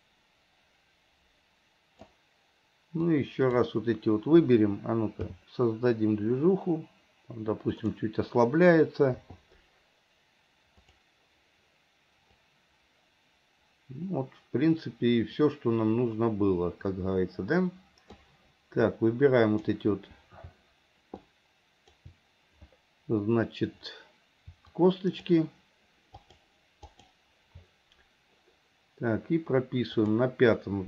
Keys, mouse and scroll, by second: 3.1-3.7 drag, 5.3 g, 9.2 i, 10.9 click, 12.4-18.2 drag, 19.0-19.8 drag, 21.3-22.1 shift+drag, 24.9 shift+click, 26.2 shift+click, 26.9 shift+click, 30.1 click.